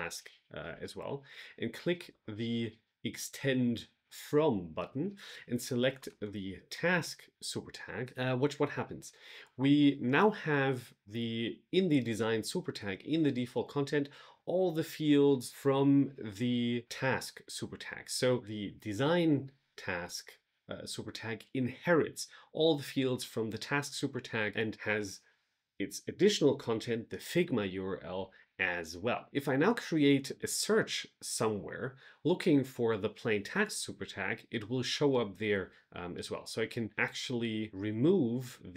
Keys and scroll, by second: 6.6 Return.